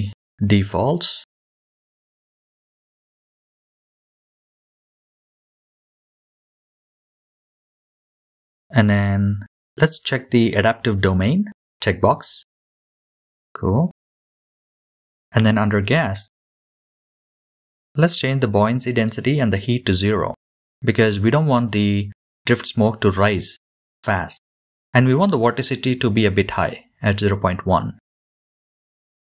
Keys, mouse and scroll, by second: 1.8-3.4 scroll down 1, 3.4-4.9 scroll down 1, 4.9-5.9 scroll down 1, 5.9-6.9 scroll down 1, 6.9-10.0 scroll down 1, 15.8 click, 17.9-19.1 scroll down 4, 20.2-21.9 drag, 22.1-27.7 drag.